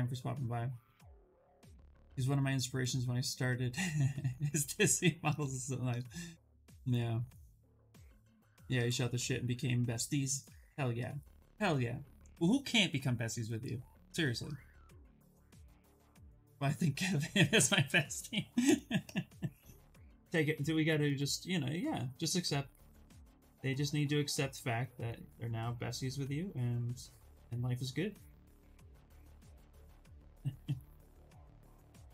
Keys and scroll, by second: 20.5 ctrl+z.